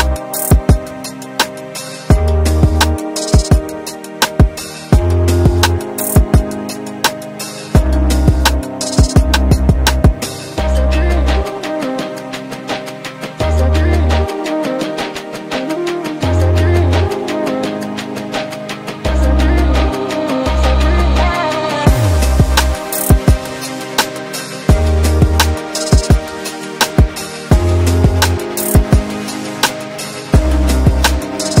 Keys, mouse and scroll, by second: 1.3 shift+click, 1.7 c, 2.3 click, 4.6 w, 5.0 click, 7.4-8.2 scroll up 1, 8.2 w, 8.6 click, 14.3 v, 15.0 click, 17.8 shift+Page_Down, 18.9 n, 19.4 click, 20.2 right click, 21.6 click, 23.5 right click, 24.9 click, 26.3-27.0 scroll down 1, 28.2-29.7 scroll up 1, 29.7-31.6 drag.